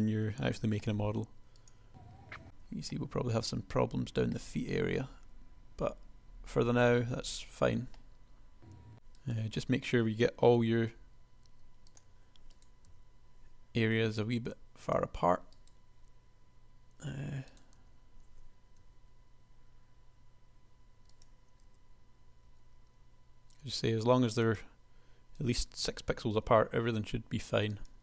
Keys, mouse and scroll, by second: 0.8 g, 2.0 l, 2.1 g, 2.4 Tab, 7.0 Tab, 9.5 l, 10.8 g, 13.0 l, 14.0 g, 18.0 l, 18.9 r, 21.9 g, 26.0 l, 26.9 g.